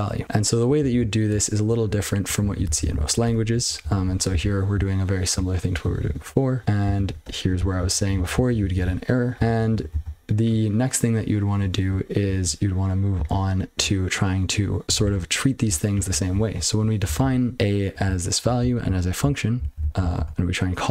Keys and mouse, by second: 1.9 click, 2.4 ctrl+n, 2.6 ctrl+n, 2.8 ctrl+n, 2.9 ctrl+n, 3.2 Tab, 3.6 ctrl+n, 4.0 ctrl+p, 4.3 ctrl+n, 4.7-5.2 ctrl+n, 5.4 ctrl+n, 5.5 ctrl+p, 5.8 ctrl+p, 6.0 ctrl+p, 6.2-6.5 ctrl+n, 6.6 ctrl+p, 6.8 ctrl+n, 7.2 Tab, 7.5 ctrl+n, 7.9 ctrl+n, 8.1 ctrl+n, 8.3 ctrl+n, 8.5 ctrl+n, 8.8-9.4 ctrl+n, 9.5 ctrl+p, 9.7 ctrl+e, 9.9 ctrl+k, 11.6 ctrl+p, 12.2 ctrl+n, 12.3 ctrl+n, 13.1 ctrl+n, 15.0 ctrl+c, 15.6-16.1 ctrl+n, 16.7 ctrl+p, 17.2 ctrl+c, 17.5-17.9 ctrl+p, 18.0-18.4 ctrl+n, 18.6 ctrl+n, 18.8 ctrl+n, 19.2-19.5 ctrl+n, 19.6 ctrl+p, 19.7 ctrl+n, 19.8 ctrl+n, 20.1 ctrl+c.